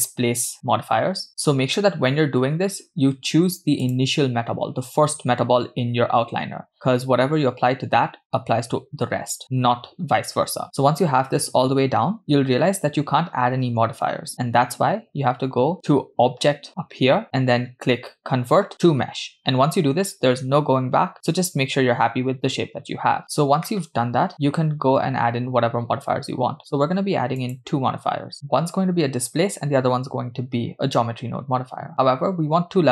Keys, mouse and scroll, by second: 3.9 click, 17.2-23.2 drag, 27.4 click, 28.3-32.9 drag.